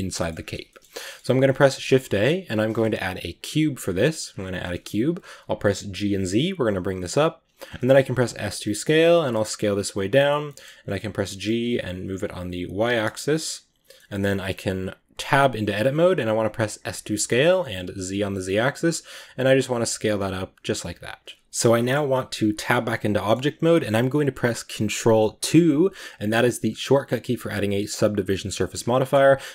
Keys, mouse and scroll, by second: 0.2 scroll up 1, 0.5 shift+middle drag, 0.7 scroll down 1, 0.8-3.9 middle drag, 3.9 shift+a, 4.1-4.5 scroll down 11, 4.5-5.6 middle drag, 5.6 g, 7.4-8.0 scroll up 11, 8.0 s, 10.3 middle click, 10.7 g, 12.9-13.9 middle drag, 13.9-14.2 scroll up 2, 15.1 Tab, 16.7 s, 21.3-22.4 shift+middle drag, 22.4 Tab, 23.0 middle click, 23.3-23.8 scroll down 2, 25.3 ctrl+2, 28.1-28.5 middle drag, 28.5-29.5 scroll up 2.